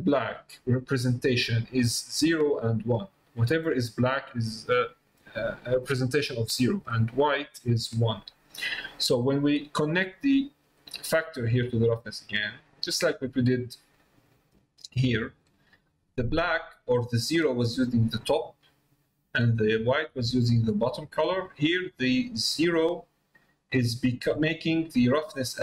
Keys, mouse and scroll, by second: 0.5 middle click, 1.5 middle click, 9.7 middle click, 10.8-12.9 drag.